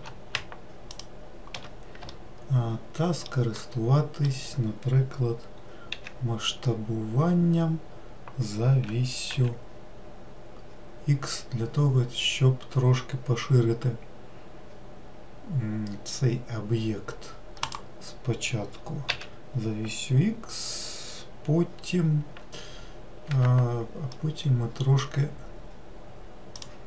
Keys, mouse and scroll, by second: 0.8 alt+shift+click, 2.0 alt+middle click, 3.5 alt+middle click, 5.8 s, 19.0 s, 24.0-26.5 middle drag, 26.5-26.8 drag.